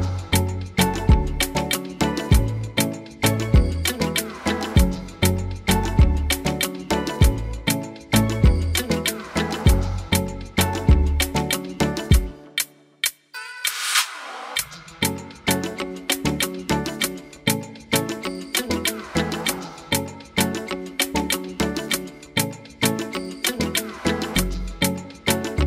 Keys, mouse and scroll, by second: 0.0 shift+middle click, 0.4 click, 0.8 shift+click, 1.1 shift+click, 1.4 shift+click, 1.7 shift+click, 1.8 shift+click, 2.0 click, 2.1 shift+middle click, 2.4 shift+click, 2.6 shift+click, 2.8 shift+click, 3.0 shift+click, 3.3 shift+click, 3.5 shift+click, 3.7 shift+click, 3.9 shift+click, 4.1 shift+click, 4.2 shift+click, 4.4 shift+click, 4.5 shift+click, 4.7 shift+click, 4.8 shift+click, 4.9-5.4 shift+click, 5.1 shift+click, 5.2 shift+click, 5.3 shift+click, 5.6 shift+click, 5.8 shift+click, 6.0 shift+click, 6.1 shift+click, 6.3 shift+click, 6.4 shift+click, 6.6 shift+click, 6.7 shift+click, 6.8 shift+click, 7.0 shift+click, 7.1 shift+click, 7.2 shift+click, 7.4 shift+click, 7.5 shift+click, 7.7 shift+click, 8.0 shift+click, 8.3-9.5 scroll down 5, 8.8 f, 9.2 middle click, 9.8-10.6 scroll down 2, 10.6 click, 10.6 scroll down 1, 11.1 g, 12.9 g, 13.8 r, 14.8 g, 16.1 g, 23.3 middle click, 25.1 s.